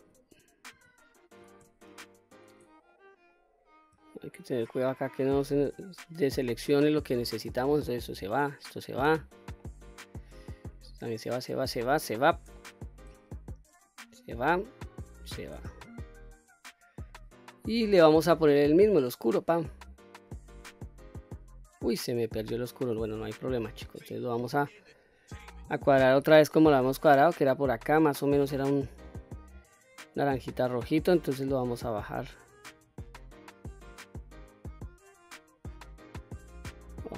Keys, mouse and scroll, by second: 0.7 ctrl+z, 1.8 shift+click, 2.9-3.2 middle drag, 3.5-3.9 scroll up 2, 4.1-4.4 shift+middle drag, 5.1 shift+click, 5.8-6.3 scroll down 2, 6.3-7.3 middle drag, 7.8 shift+click, 8.4 shift+click, 9.2-9.6 scroll down 1, 9.6-10.2 middle drag, 10.7 shift+click, 11.2 shift+click, 11.6 shift+click, 12.1 shift+click, 12.5-13.1 middle drag, 13.8 shift+click, 14.8 shift+click, 15.6-17.0 middle drag, 17.5 middle click, 19.0 click, 21.2-21.6 scroll up 1, 22.3 scroll down 1, 23.1-24.0 scroll up 1, 26.0 click.